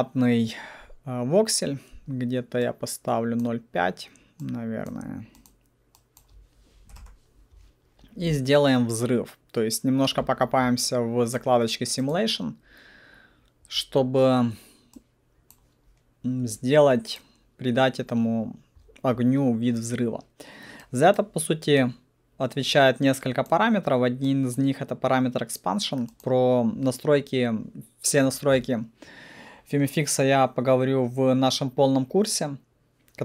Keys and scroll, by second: 6.9 alt+5, 7.0 Return.